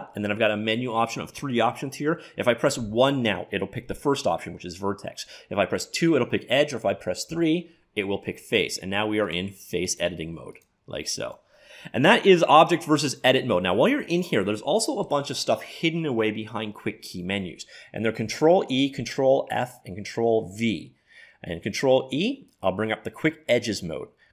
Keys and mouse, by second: 9.3 click, 11.1-12.9 drag, 21.5 ctrl+e.